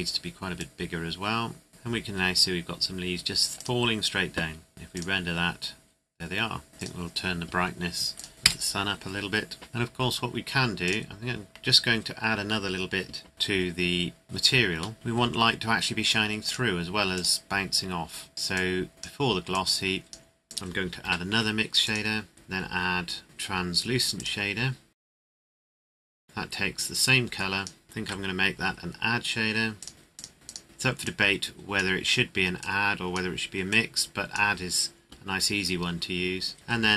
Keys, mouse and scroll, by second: 0.5 click, 3.5 click, 8.3 KP_5, 8.4 KP_Enter, 9.7-10.8 scroll down 1, 10.8 click, 13.3 KP_0, 14.2 click, 14.9 shift+middle click, 15.3-15.9 scroll up 1, 16.4 click, 18.3 scroll down 1, 18.5 click, 21.0 shift+d, 21.8 click, 24.1 click, 29.8 click.